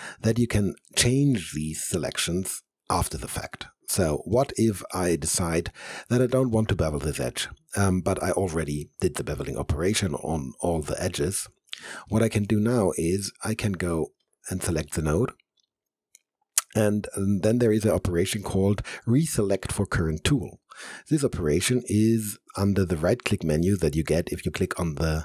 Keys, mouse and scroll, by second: 9.4 alt+click, 9.9 alt+middle click, 10.9 alt+click, 11.4 alt+middle click, 12.1 alt+right click, 13.3 alt+middle click, 14.2 click, 22.8-25.2 right drag.